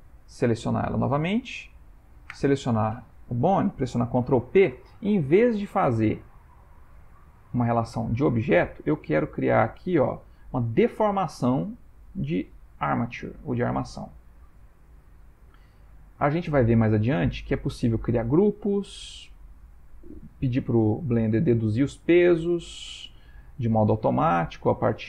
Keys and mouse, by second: 2.7 shift+click, 4.2 ctrl+p, 9.2 Down, 16.0 Down, 17.3 Up.